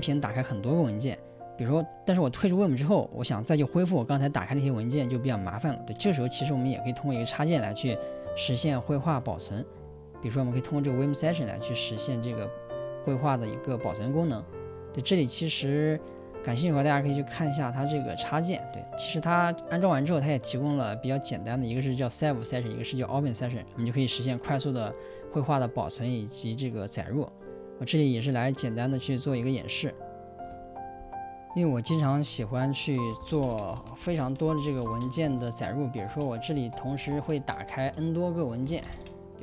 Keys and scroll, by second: 33.2-39.4 typing, 36.5 ctrl+;, 36.8 Escape.